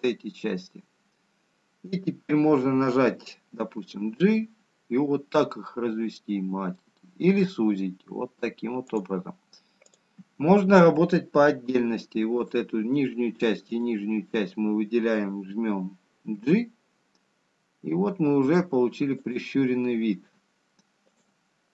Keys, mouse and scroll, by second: 0.0 shift+click, 6.0 g, 12.3 click, 14.8 shift+click, 18.9 g.